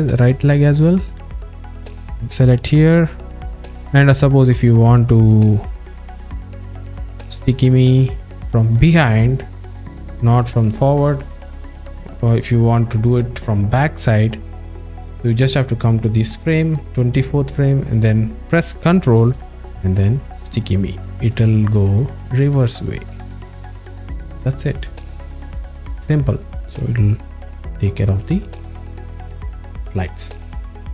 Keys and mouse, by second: 0.9-9.6 drag, 15.3 click, 20.6 ctrl+click, 20.9 ctrl+click, 21.2 ctrl+click, 21.6 ctrl+click, 21.9 ctrl+click, 22.1 ctrl+click, 22.4 ctrl+click, 22.7 ctrl+click, 24.6 click.